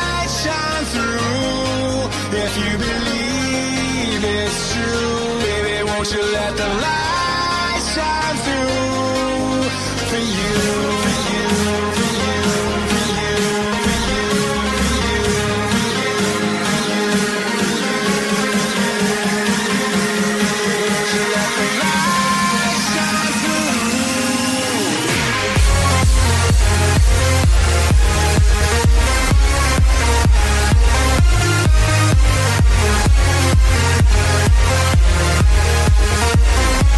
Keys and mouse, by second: 3.6 click, 11.3 click, 13.7 click, 17.7 click, 19.8 click, 24.4 click, 25.1 click, 26.7 click, 27.5-30.7 typing, 30.8 click, 33.5 click, 36.3 click, 36.8 click.